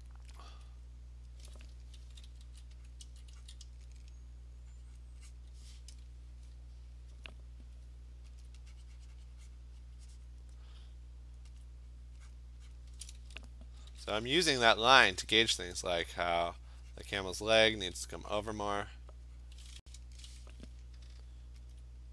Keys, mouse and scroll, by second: 0.6 alt+click, 1.0 click, 1.3 click, 2.1 alt+click, 2.1-3.4 typing, 3.0 click, 3.5 click, 5.0 click, 5.4 click, 8.5 alt+click, 8.7 alt+click, 9.6 click, 10.3 click, 11.7 alt+click, 12.4 click, 12.8 click, 13.9 [, 14.1 [, 14.3 [, 14.5 [, 15.0 click, 15.8 [, 16.1 [, 17.1 click, 17.7 ], 17.9 ], 18.1 ], 18.8 click, 19.5 click, 21.7 alt+click, 21.9 alt+click.